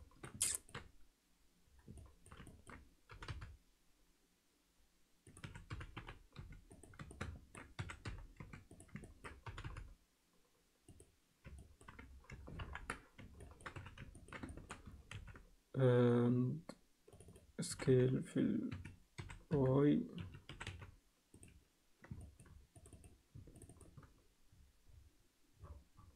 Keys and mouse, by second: 0.4 ctrl+alt+middle click, 2.0 alt+middle click, 2.5 ctrl+alt+middle click, 3.1 g, 5.4 s, 7.1 ctrl+alt+middle click, 7.7 s, 9.0 ctrl+alt+middle click, 9.5 g, 11.5 ctrl+alt+middle click, 12.6 ctrl+KP_1, 13.4 ctrl+alt+middle click, 13.8 z, 14.1 ctrl+alt+middle click, 14.5 alt+shift+middle click, 15.1 ctrl+r, 17.7 s, 19.1 s, 20.5 s, 22.2 alt+shift+middle click, 22.8 click, 22.9 click, 23.7 shift+click.